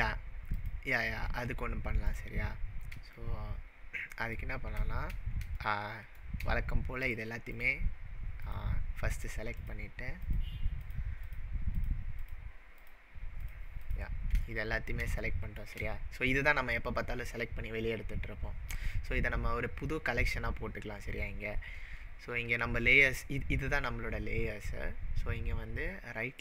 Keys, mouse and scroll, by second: 0.6 click, 2.1 click, 2.5-3.0 scroll down 4, 3.2-4.3 shift+middle drag, 7.0 shift+click, 7.5 shift+drag, 8.5 shift+click, 9.1 shift+click, 9.6 shift+click, 10.2 shift+click, 10.9 shift+click, 11.2 shift+click, 11.8 shift+click, 12.2 shift+click, 12.8 shift+click, 13.5 shift+click, 13.9 shift+click, 14.5-15.0 shift+middle drag, 23.3-24.1 scroll down 7, 24.0-25.6 scroll up 16.